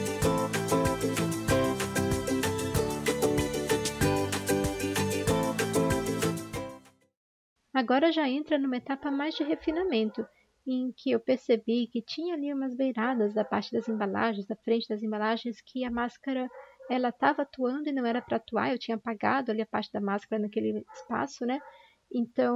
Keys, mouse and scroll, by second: 0.4 ctrl+z, 1.1 ctrl+z, 2.0 ctrl+z, 3.4 ctrl+z, 5.1 ctrl+d, 12.1 typing, 18.9 typing.